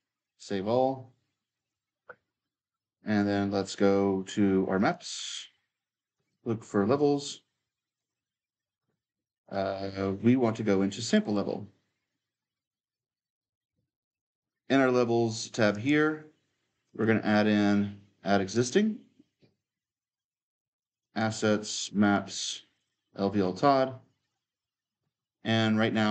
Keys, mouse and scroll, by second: 0.0-3.5 drag, 4.6-9.9 drag, 10.8-12.7 drag, 12.7-15.5 right drag, 13.2 q, 13.6 q, 15.5-20.4 drag, 20.6-26.1 drag.